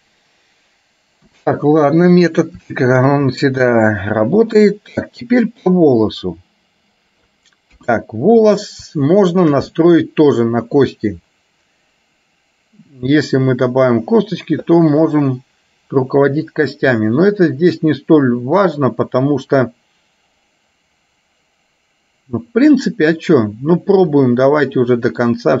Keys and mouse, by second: 1.5 KP_1, 2.9 shift+middle click, 5.1-7.4 middle drag, 7.9 KP_1, 9.4 middle click, 9.9 middle click, 15.0-16.7 middle drag, 17.1-18.7 middle drag, 24.1 click, 25.0 middle click.